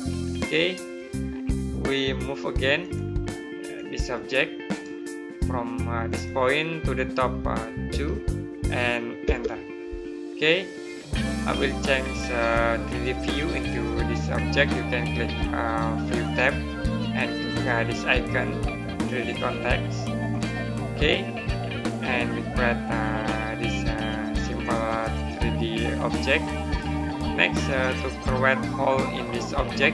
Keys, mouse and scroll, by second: 0.5 middle click, 1.1 scroll down 1, 2.7 click, 4.6 right click, 5.9 click, 7.7 KP_2, 12.0 middle click, 16.1 click, 20.2 click, 21.8 middle click, 25.9 middle click.